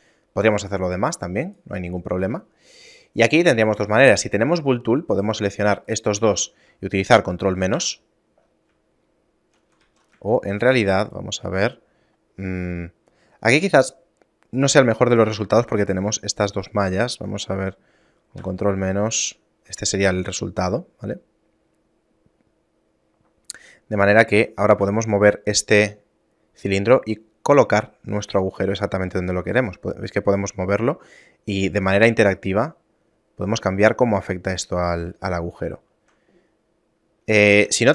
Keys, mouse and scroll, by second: 2.6 shift+middle click, 5.2 right click, 6.0 shift+right click, 7.8 ctrl+KP_Subtract, 9.2 shift+middle click, 9.9 ctrl+z, 10.4 shift+middle click, 11.1 right click, 14.0 shift+middle click, 15.8 right click, 16.6 shift+right click, 18.5 ctrl+KP_Subtract, 19.8 shift+middle click, 24.4 right click, 24.8 g, 28.6 shift+middle click, 29.7 g, 35.4 shift+middle click, 37.7 ctrl+z.